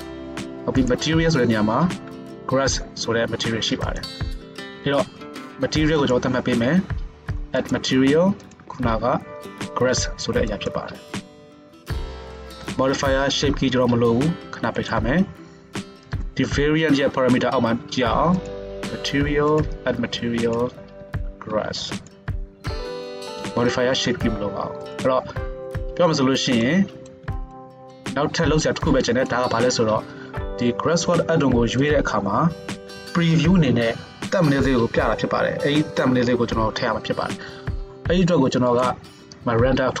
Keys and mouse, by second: 1.0-6.1 right drag, 6.1 middle drag, 6.2-12.1 right drag, 7.7-12.1 drag, 7.7-18.6 middle drag, 18.6-19.6 right drag, 19.6-32.0 middle drag, 21.7 s, 26.6 shift+click, 26.6 shift+right click, 30.0 alt+a, 32.0 click, 32.8-40.0 middle drag.